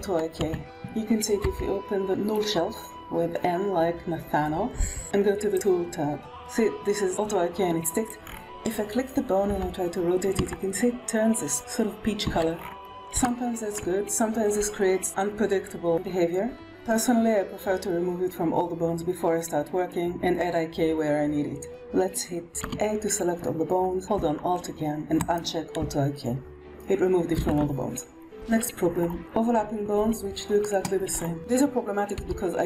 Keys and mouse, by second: 1.3 n, 5.4-8.1 drag, 9.4 g, 11.5 r, 13.1 shift+middle click, 22.5 a, 25.1 alt+click, 27.3 alt+a, 31.3 g, 32.0 g.